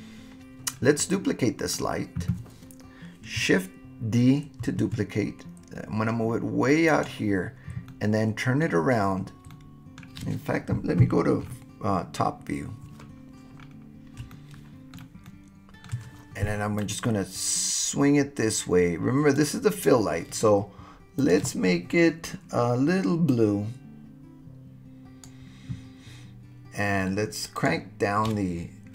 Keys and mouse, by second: 1.1-1.8 middle drag, 4.7 shift+d, 6.9 click, 7.9 middle click, 9.5-10.1 middle drag, 11.0 KP_7, 14.3 shift+middle click, 15.3 shift+middle click, 16.9-19.4 drag, 27.6-28.9 drag.